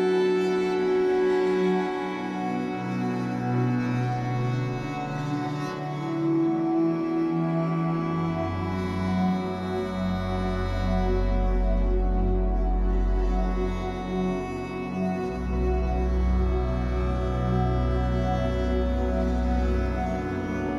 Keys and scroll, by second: 0.9 3, 3.7 shift+Up, 8.1 shift+Down, 17.6 Escape, 19.7 ctrl+s, 20.2 Escape.